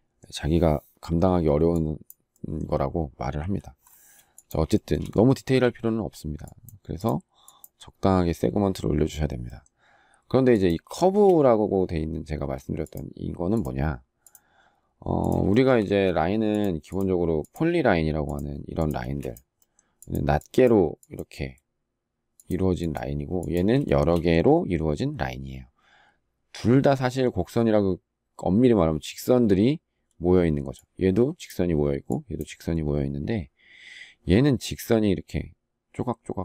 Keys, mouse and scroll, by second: 3.1 Delete, 4.5 shift+middle click, 4.7 shift+double middle click, 10.7 shift+middle click, 15.2 shift+middle click, 15.4 shift+double middle click, 15.6 space, 18.8 space, 23.6 shift+middle click.